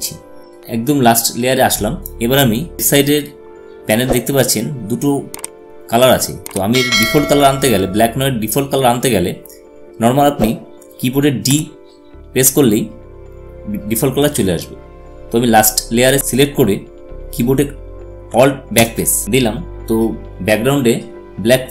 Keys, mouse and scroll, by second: 11.0 d, 18.1 alt+d, 18.6 alt+BackSpace.